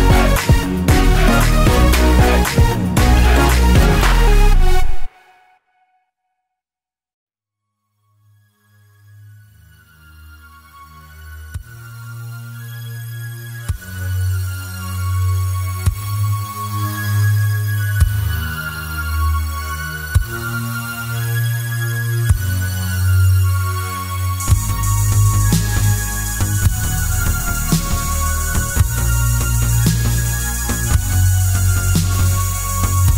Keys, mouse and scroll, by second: 0.5 KP_Decimal, 0.8-1.6 scroll down 4, 1.1-4.8 middle drag, 2.8 r, 4.8 click, 5.0 g, 6.0 click, 6.1-9.0 middle drag, 6.8 scroll down 1, 9.0 click, 9.5-10.9 middle drag, 10.3-10.7 scroll up 1, 10.9 click, 12.6 s, 13.2 click, 13.3-16.1 middle drag, 14.4 scroll up 1, 15.6 Tab, 16.1 click, 16.5 ctrl+click, 17.1 ctrl+click, 17.4 ctrl+click, 17.7 ctrl+click, 17.9-20.1 middle drag, 18.6 scroll up 1, 20.5 click, 21.0 ctrl+z, 21.5 shift+click, 22.4-24.1 middle drag, 24.5 click, 24.8-26.1 right drag, 26.1-30.5 middle drag, 27.1-27.6 scroll up 2, 27.6 scroll down 2, 28.3 ctrl+r, 30.5 click, 30.9 s.